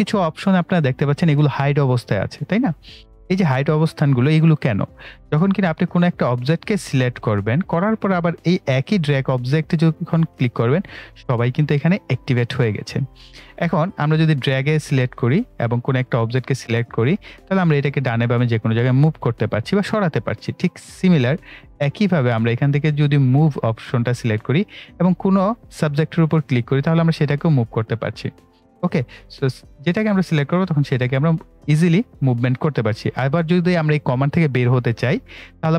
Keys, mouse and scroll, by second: 5.7 click, 9.1 click, 16.6 click, 19.0 click, 20.2 right click, 21.2-23.4 drag.